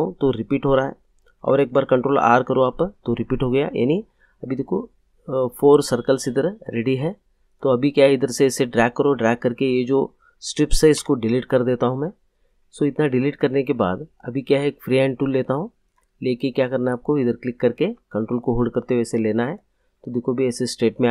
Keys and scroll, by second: 2.1 ctrl+r, 10.9 Delete.